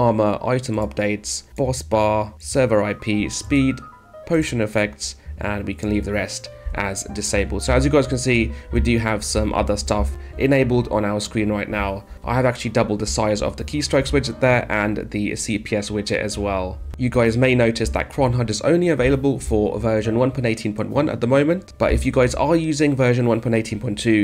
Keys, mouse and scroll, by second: 8.2-10.3 typing, 11.5 space, 13.8 d, 16.8 d, 18.3 space, 21.6 space.